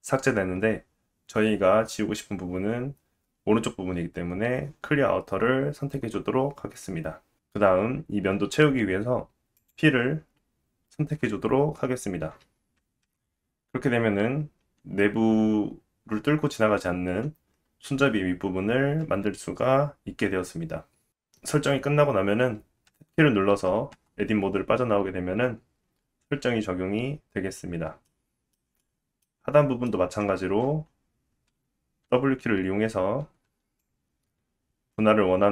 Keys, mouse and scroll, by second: 7.5 middle click, 9.6 click, 13.0 KP_1, 13.9-14.7 scroll down 3, 14.7-16.2 scroll up 2, 23.9 Tab, 28.3 shift+middle drag, 30.5 Tab, 32.1 w, 33.2 w, 33.5 w, 33.8-35.5 drag.